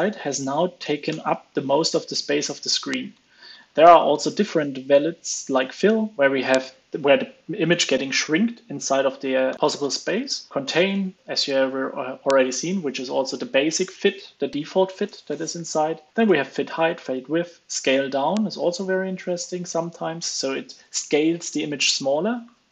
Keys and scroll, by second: 1.0 alt+super+l, 1.2 super+s, 2.8 super+Right, 3.5 alt+shift+Left, 4.0 ctrl+space, 9.4 alt+shift+Left, 9.5 ctrl+space, 10.8 super+s, 11.2 alt+shift+Left, 15.2 ctrl+space, 18.1 super+s, 19.3 alt+shift+Left.